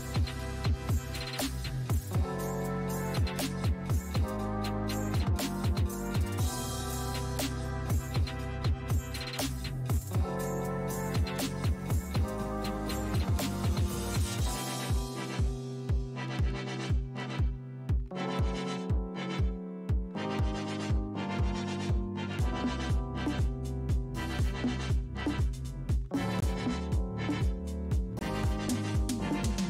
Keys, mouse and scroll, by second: 1.6 alt+middle click, 2.6-5.1 drag, 5.1 f, 6.0-15.5 drag, 15.5-22.5 middle drag, 24.3-28.6 middle drag, 28.6 ctrl+r, 29.2-29.6 middle drag.